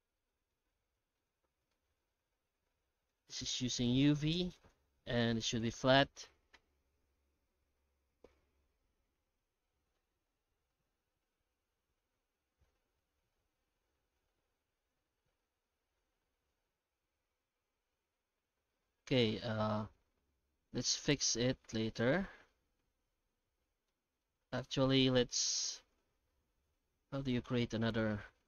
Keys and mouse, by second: 0.2 middle click, 1.0 middle click, 2.1 middle click, 3.9 middle click, 4.6-5.8 drag, 19.2-20.7 middle drag, 22.0-23.9 middle drag, 24.2-25.1 middle drag, 25.4 Tab, 26.1 alt+shift+z, 27.9 u.